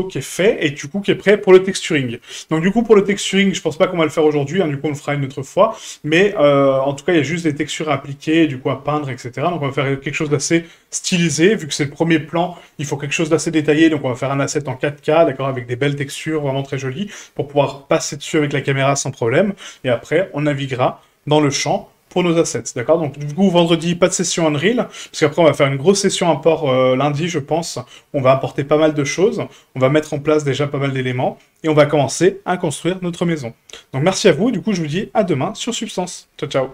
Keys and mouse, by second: 3.4-3.7 middle drag, 4.9 right click, 5.8-9.4 middle drag.